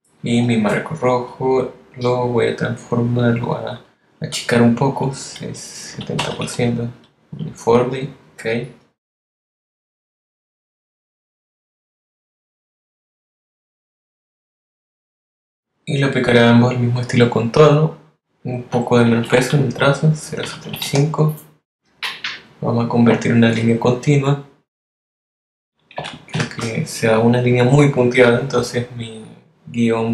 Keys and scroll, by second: 7.2 0, 21.8 0, 28.7 shift+Left.